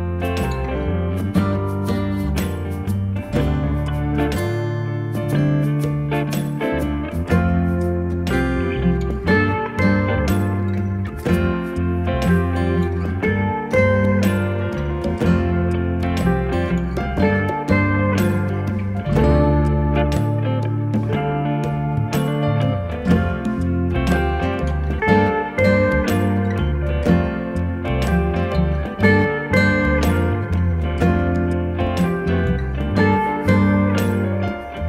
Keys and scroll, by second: 14.2 2, 14.3 5, 17.3 3, 22.2 BackSpace, 25.3 7.